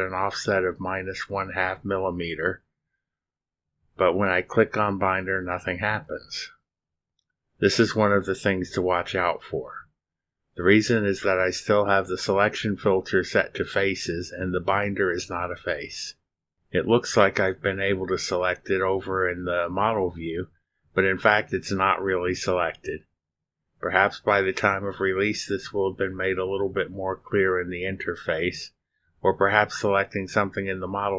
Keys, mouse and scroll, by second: 0.4 space, 2.7 click, 6.0 click, 8.6 click.